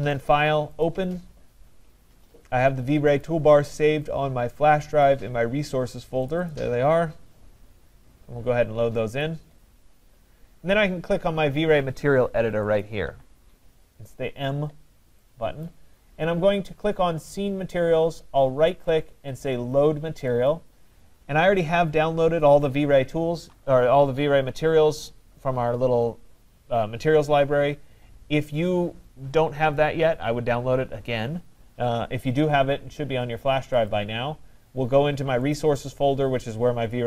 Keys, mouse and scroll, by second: 0.3 click, 0.9 click, 3.2 click, 4.8 click, 5.1 click, 6.3 click, 6.5 click, 9.2 click, 12.8 click, 15.7 click, 16.7 click, 18.8 right click, 20.5 click, 33.9 click, 35.6 click, 35.8 click.